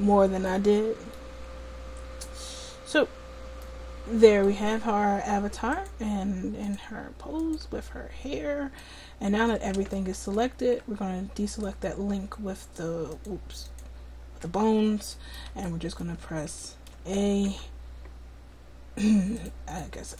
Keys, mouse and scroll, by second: 3.0 middle click, 5.8 click, 6.6-9.0 right drag, 8.4 middle click, 11.5 click, 12.1-15.9 drag, 17.2 a, 17.5 a, 19.4 click.